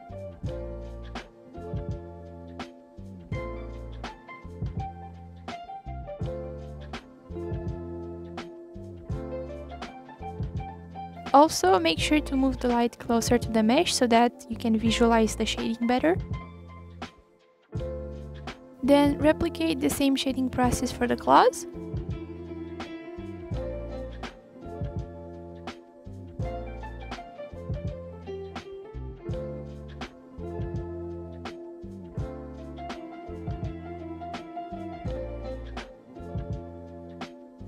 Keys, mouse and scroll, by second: 9.1 f, 11.3 scroll down 1, 11.6-12.1 middle drag, 12.1-12.6 scroll down 1, 12.6 click, 13.0 scroll down 1, 13.2 scroll up 2, 13.5 scroll down 1, 13.6-14.0 scroll up 1, 14.0 g, 14.9 click, 15.7 scroll down 2, 15.9-16.5 scroll up 5, 16.5 g, 17.5 scroll down 1, 17.7 scroll up 2, 17.8 click, 18.9 click, 19.7 click, 20.4 Delete, 20.8 ctrl+z, 21.9 shift+a, 24.8 click, 26.8 shift+a, 27.6 click, 28.7 click, 29.2 click, 30.1-32.6 drag, 32.6 ctrl+z, 35.2 f, 35.8-36.7 drag, 37.5 click.